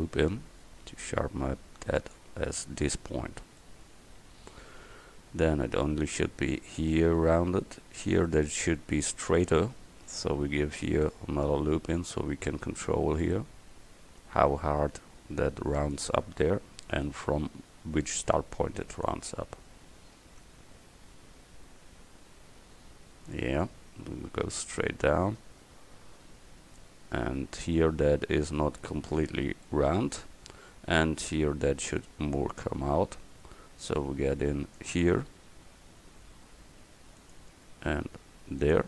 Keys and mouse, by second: 10.2 ctrl+r, 16.6 ctrl+r, 19.6 a, 20.5 Tab, 29.7 middle click, 32.6 Tab, 34.0 ctrl+r, 37.9 ctrl+r.